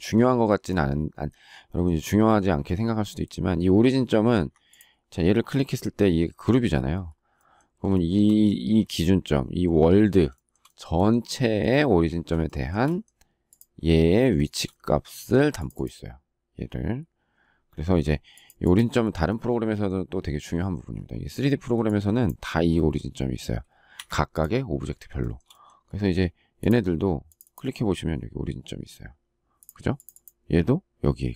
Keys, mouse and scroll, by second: 4.3 Escape, 7.9 shift+middle click, 10.3 shift+middle click, 12.4 shift+middle click, 14.3 shift+middle click, 17.9 Escape, 23.9 Escape, 25.2 shift+middle click.